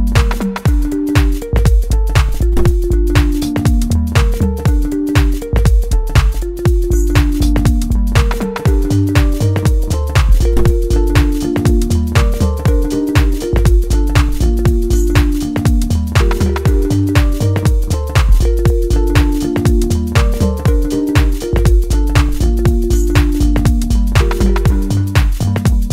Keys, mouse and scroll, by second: 4.4-12.6 drag, 12.6-14.9 middle drag, 14.9 scroll down 1, 15.3 middle click, 16.5 click, 17.2-21.4 middle drag, 21.4 scroll down 2, 21.7 shift+middle click, 22.3 scroll up 1, 22.6 middle click, 23.8 click, 24.3-24.6 scroll down 2, 24.6-25.9 shift+middle drag.